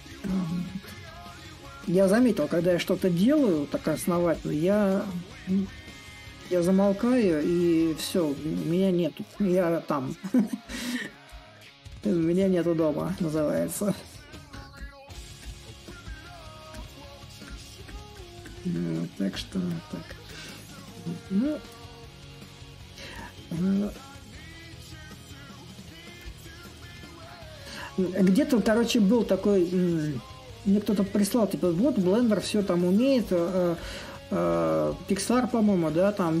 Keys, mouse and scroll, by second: 0.0-1.5 drag, 1.5 s, 4.1-9.1 drag, 10.4-15.4 drag, 15.8-20.8 drag, 21.0-26.0 drag, 26.3-31.3 drag, 31.4-36.4 drag.